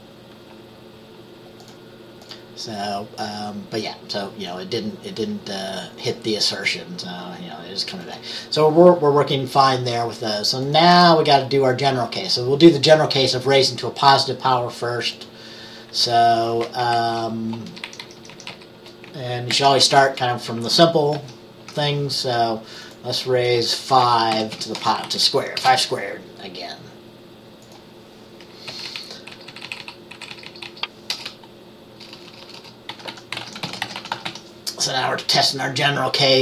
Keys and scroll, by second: 17.0 Right, 17.8 shift+Down, 18.0 shift+Down, 18.1 shift+Down, 18.3 shift+Down, 19.6 ctrl+c, 20.0 Down, 21.2 ctrl+v, 23.9-25.8 typing, 25.1 Left, 28.8 Right, 28.9 Right, 29.4 Right, 29.6-30.8 Right, 31.2-34.9 typing.